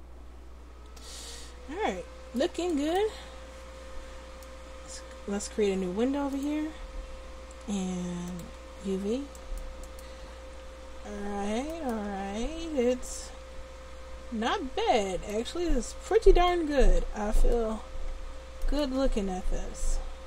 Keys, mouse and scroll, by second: 1.3 middle click, 4.8-8.7 drag, 9.4-11.8 right drag, 10.3 Tab, 11.2 Tab, 12.1 Tab, 18.2 Tab, 19.0 Tab.